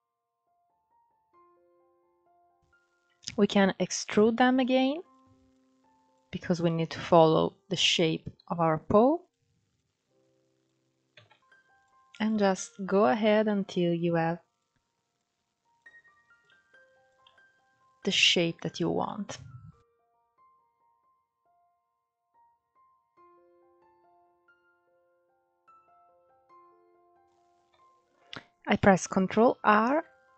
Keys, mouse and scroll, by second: 1.0-1.6 scroll down 7, 1.6 scroll up 6, 3.5 e, 4.8 click, 5.8 click, 8.0 s, 9.4 click, 10.8 e, 11.9 click, 13.1 s, 14.8 click, 16.1 click, 17.0 scroll down 7, 17.4-18.1 scroll up 9, 18.7 shift+middle click, 19.3 scroll up 1, 19.9 ctrl+1, 20.2 alt+z, 20.6 click, 21.2 click, 21.4 click, 21.8 click, 22.0 alt+z, 22.5 ctrl+z, 22.7 ctrl+z, 23.1 click, 23.3 alt+z, 23.4 scroll down 1, 23.6 s, 24.1 click, 24.7 r, 25.2 alt+z, 25.7 click, 26.2 click, 26.4 alt+z, 26.6 alt+z, 29.3 ctrl+r.